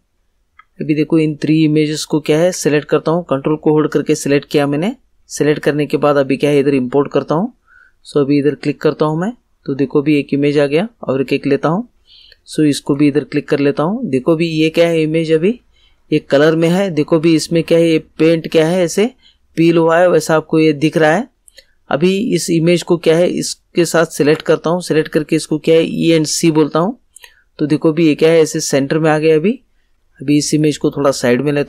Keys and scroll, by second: 25.7 e, 26.1 c.